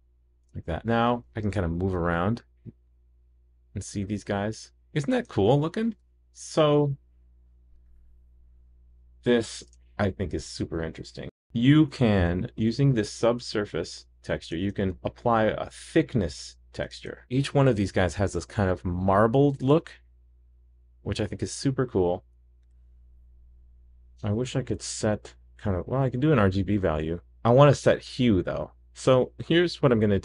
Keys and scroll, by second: 0.4 super+s, 13.2 super+s, 14.8 super+c, 17.1 super+v.